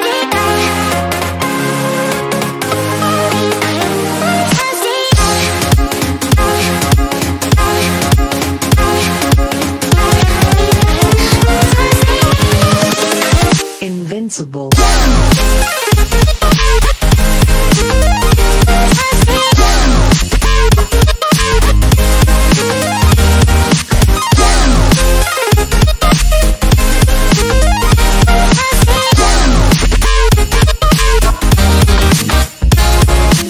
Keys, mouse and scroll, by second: 0.2 shift+m, 2.4-3.2 drag, 3.1 click, 7.8-8.1 drag, 12.9 click, 15.6-16.6 drag, 19.6 click, 22.4 right click, 23.2 click, 25.0 scroll down 1, 25.1 scroll up 1, 25.3 scroll down 1, 25.5-26.0 scroll up 1, 26.1 scroll down 1, 26.2-26.6 scroll up 1, 27.9-28.3 click, 28.4-29.3 scroll up 1, 29.4-30.6 drag, 31.4-32.0 scroll down 2, 32.9-33.2 scroll down 2.